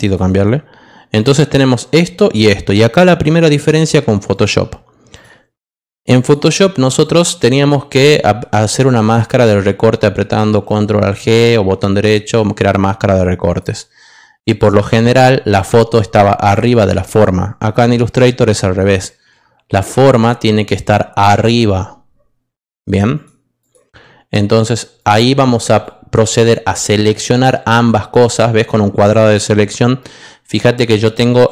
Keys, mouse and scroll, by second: 0.0 click, 1.2 click, 2.2 click, 4.3 click, 5.1 click, 6.1 click, 7.0 click, 7.5 click, 13.4 click, 14.5 click, 16.5 click, 18.8-20.1 drag, 24.9 click, 26.7 click, 27.1-29.2 drag.